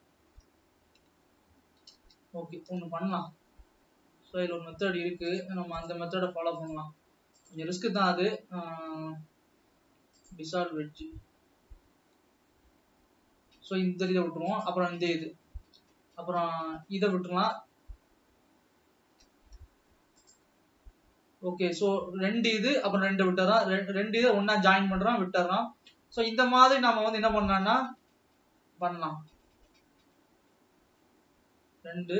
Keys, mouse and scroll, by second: 2.1 ctrl+z, 3.3 alt+a, 5.3 click, 6.7 click, 7.4-8.1 drag, 9.1 x, 15.4 click, 19.6 x, 26.7 click.